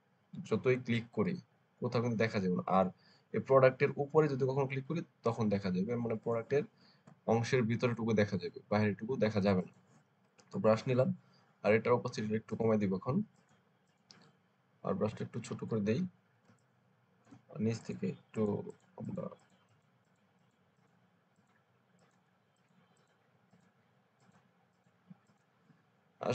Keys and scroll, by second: 15.4 [, 15.6 [, 16.3 space.